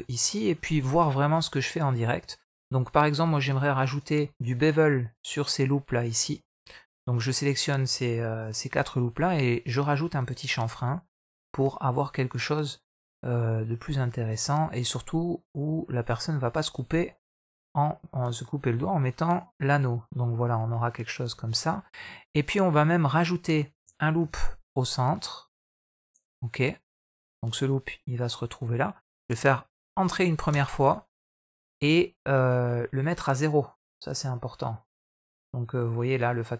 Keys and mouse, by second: 0.5 shift+middle click, 1.1 middle click, 3.7 alt+shift+click, 4.1 middle click, 5.1 alt+shift+click, 5.9 alt+shift+click, 6.3 middle click, 8.8 ctrl+b, 16.3-18.3 middle drag, 18.6 Tab, 19.2-19.8 middle drag, 20.2-20.7 middle drag, 21.1 Tab, 24.0 ctrl+r, 31.3-32.3 middle drag, 33.5 drag, 35.9-36.5 drag.